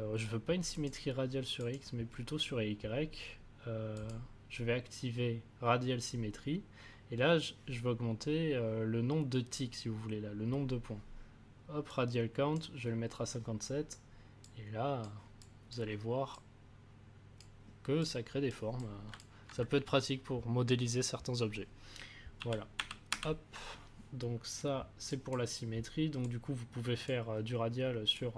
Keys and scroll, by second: 22.3 ctrl+z.